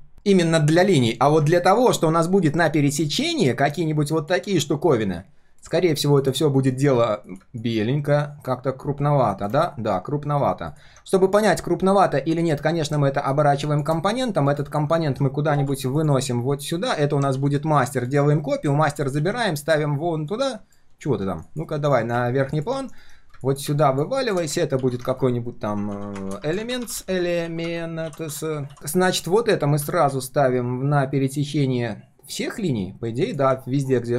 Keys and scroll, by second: 17.3 ctrl+d, 18.8 ctrl+x, 19.1 ctrl+v, 22.0 ctrl+shift+], 22.8 alt+h, 23.0 alt+v, 24.8 ctrl+g, 25.1 ctrl+r.